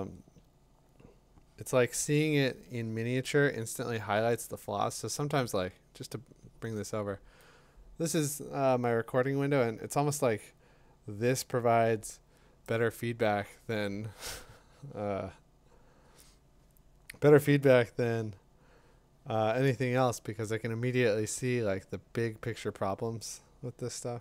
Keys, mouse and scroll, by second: 12.6-15.7 drag.